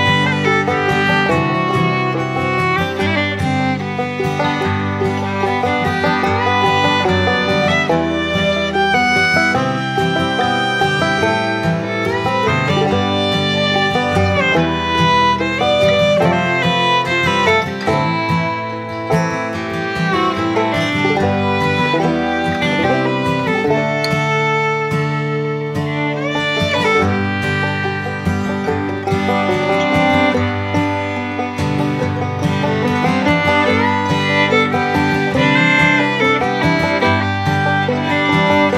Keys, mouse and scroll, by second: 0.1-5.4 alt+drag, 5.4-10.2 alt+drag, 12.6 right click, 13.3 click, 16.1 click, 20.4-28.5 drag, 29.0-30.7 drag, 33.4 click, 34.3 Right, 35.8-38.4 drag.